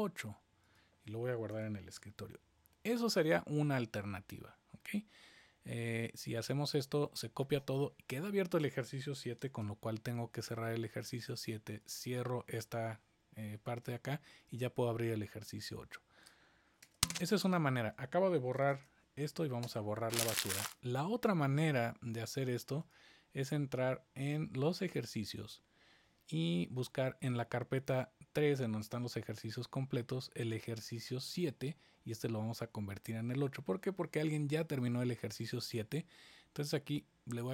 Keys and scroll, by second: 9.1 super+s, 9.4 shift+super+w, 16.8 super+BackSpace, 18.7 shift+super+BackSpace.